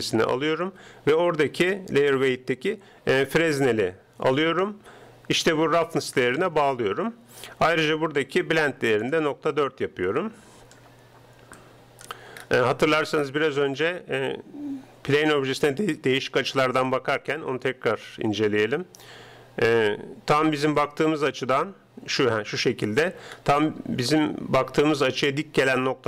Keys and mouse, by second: 4.4-6.2 drag, 12.8-16.0 middle drag, 17.0-18.9 drag, 18.9 middle click, 21.3-22.8 middle drag, 23.4-25.6 middle drag.